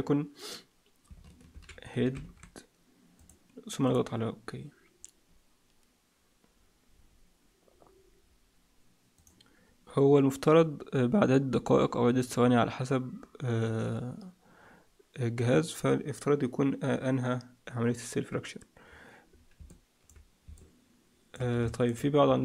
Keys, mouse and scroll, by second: 9.3 click, 19.6 click, 20.5 middle click, 21.6 shift+middle click, 22.1-22.4 scroll up 4.